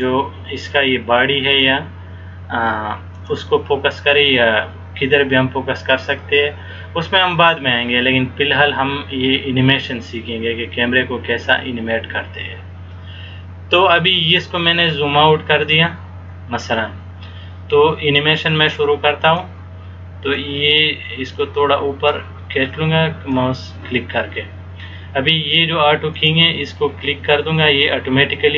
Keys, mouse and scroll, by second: 15.3-15.9 scroll down 1, 19.5 click, 26.4 click.